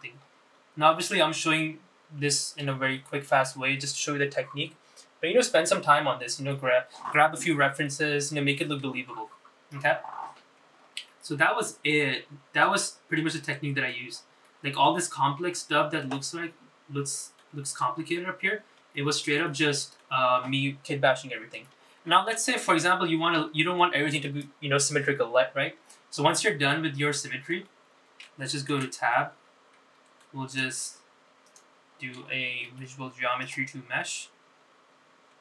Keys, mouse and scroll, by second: 0.6 shift+middle click, 1.4-3.8 scroll up 3, 12.2-13.8 middle drag, 14.0 shift+middle click, 14.6 middle click, 15.2 scroll up 2, 15.6 shift+middle click, 16.6 middle click, 17.3-18.6 shift+middle drag, 19.4-19.9 scroll down 4, 20.1 shift+middle click, 20.6 middle click, 24.0 middle click, 27.6-28.6 middle drag, 28.8 middle click, 30.0 Tab, 30.2-31.4 middle drag, 31.6 shift+click, 32.6 shift+click, 33.8 ctrl+a.